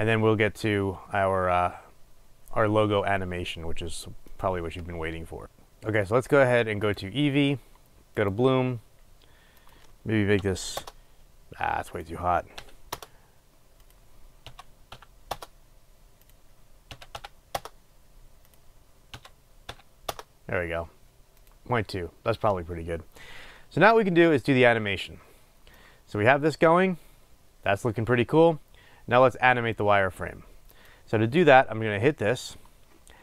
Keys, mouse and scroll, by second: 5.4 click, 11.0-22.1 drag, 11.1 Return, 13.3 Return, 17.9 Return, 20.4 Return, 26.0-31.1 drag.